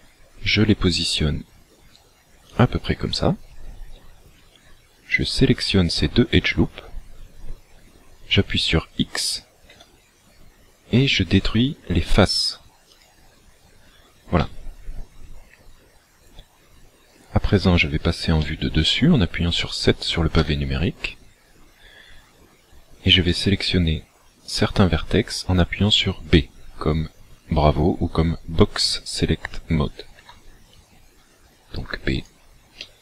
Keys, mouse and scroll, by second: 2.7 click, 5.2 alt+shift+right click, 9.8 x, 14.4 middle click, 18.4 middle click, 20.4 KP_7, 30.3 b, 32.8 middle click.